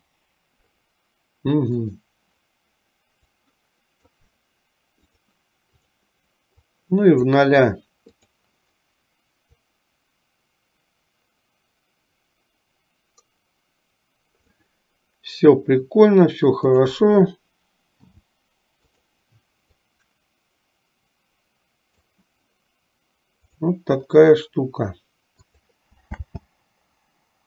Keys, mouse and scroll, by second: 1.9 click, 3.5 click, 6.8 click, 9.7-14.5 drag, 16.8 click, 19.9-22.2 drag, 23.5 click, 25.4 click.